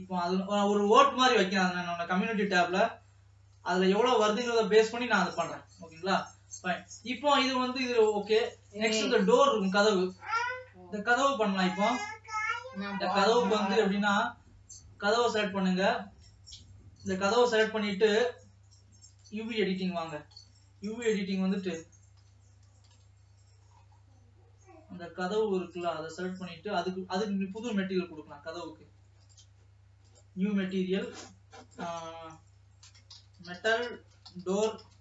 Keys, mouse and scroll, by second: 1.1 Tab, 1.6 alt+a, 2.6 l, 2.7 l, 3.1 l, 3.8 l, 5.1 ctrl+s, 6.1 alt+a, 7.0-9.4 shift+middle drag, 9.4 scroll up 4, 9.7-11.6 middle drag, 11.6 shift+scroll down 2, 11.8-13.1 shift+middle drag, 13.1-13.6 scroll up 3, 15.4 click, 16.2-17.0 scroll down 5, 17.0 scroll down 1, 19.4 click, 25.7-27.7 drag, 30.1-35.0 drag.